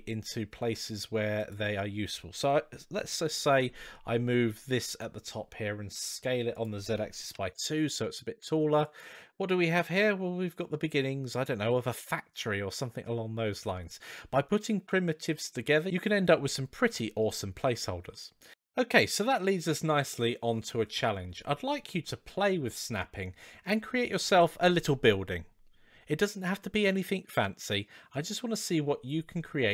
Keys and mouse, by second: 3.4 g, 6.3-7.8 drag, 8.1 g, 9.1-11.5 middle drag, 15.9-16.4 middle drag, 17.9-18.7 middle drag.